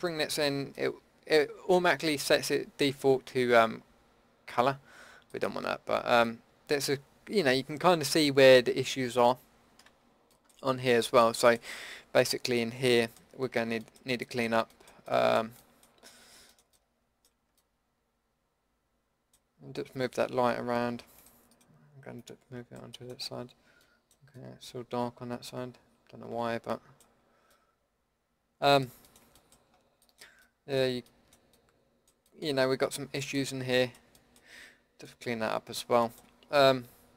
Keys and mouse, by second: 0.8-5.3 middle drag, 5.4-6.3 middle drag, 6.7 middle click, 8.6-9.3 middle drag, 10.3-11.4 middle drag, 13.1-16.5 middle drag, 18.4-19.3 middle drag, 19.5-19.8 middle drag, 21.2-24.0 drag, 24.4 middle drag, 30.2-30.6 drag, 30.6-33.7 middle drag.